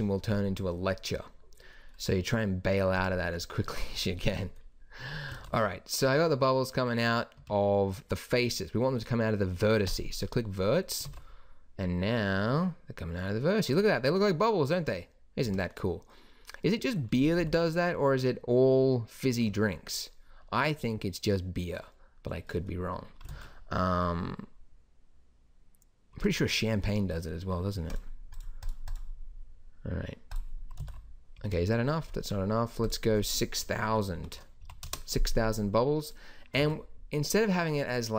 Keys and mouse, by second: 5.4 alt+a, 7.4 Escape, 11.0 alt+a, 15.5 Escape, 17.4 alt+a, 19.3 Escape, 23.3 alt+a, 26.1 Escape, 30.8 alt+a, 31.4 Escape, 36.6 alt+a.